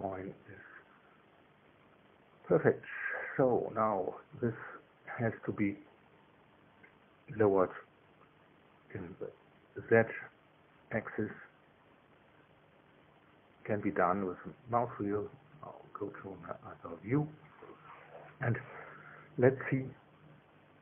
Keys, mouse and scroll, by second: 3.0-4.3 drag, 4.5-5.7 drag, 7.2 click, 15.2-17.4 drag, 17.8-18.8 drag, 19.1 shift+click.